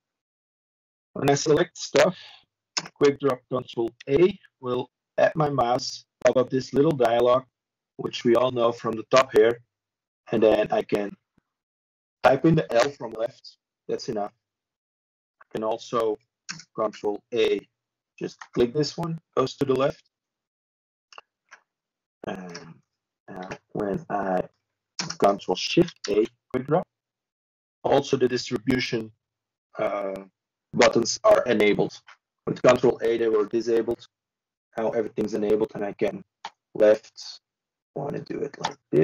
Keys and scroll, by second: 4.8 ctrl+space, 6.4 Escape, 7.9 Escape, 9.3 ctrl+space, 9.9-11.3 typing, 12.4 ctrl+p, 16.3 ctrl+c, 18.8 ctrl+space, 21.8 ctrl+p, 30.6 ctrl+space, 31.6 ctrl+r, 34.3 ctrl+z, 37.4 ctrl+space, 38.8 ctrl+r.